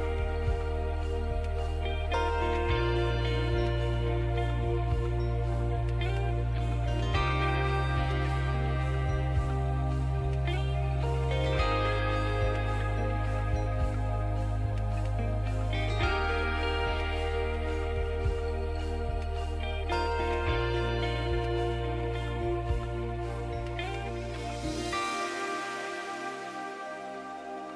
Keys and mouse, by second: 0.1 s, 8.2 s, 13.1 Tab, 16.5-26.5 middle drag, 26.5 z.